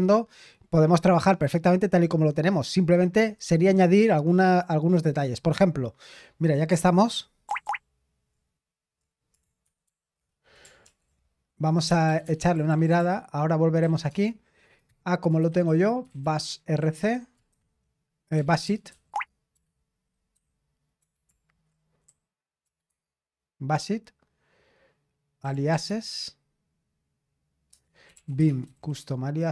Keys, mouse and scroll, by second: 4.8 click, 7.5 super+*, 7.6 super+*, 9.6 ctrl+*, 9.8 ctrl+*, 10.8 ctrl+l, 11.9 BackSpace, 12.0 BackSpace, 12.2 BackSpace, 13.8 BackSpace, 15.1-21.0 typing, 22.1-23.5 typing, 24.9-25.9 typing, 25.4 Tab, 27.7 Tab, 27.8-29.5 typing.